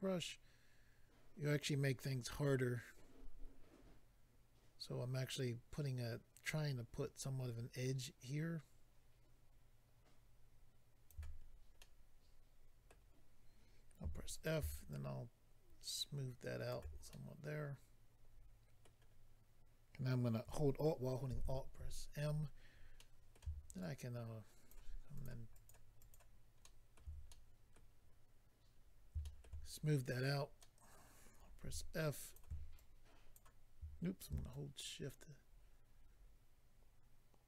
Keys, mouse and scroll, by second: 11.4-11.8 scroll down 3, 11.8 middle click, 14.0 f, 14.3 click, 14.5 click, 14.9 shift+click, 17.1 middle click, 19.1 scroll down 1, 21.3 alt+m, 23.0 middle click, 23.8 shift+click, 25.1 shift+click, 25.2 shift+click, 25.5 shift+click, 25.7 shift+double click, 26.0 shift+click, 26.1 shift+click, 26.6 shift+middle click, 27.3 middle click, 28.1-28.8 scroll up 2, 28.8-29.4 scroll up 2, 29.6-29.9 scroll up 4, 30.6 middle click, 31.6 f, 32.2 click, 32.7 ctrl+click, 33.3 click, 34.5 shift+click.